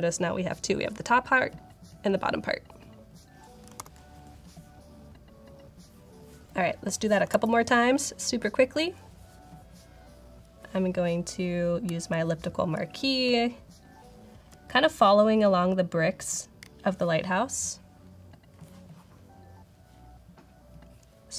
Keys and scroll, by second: 3.9 alt+super+8, 7.2 super+=, 13.1 alt+space, 13.6 alt+space.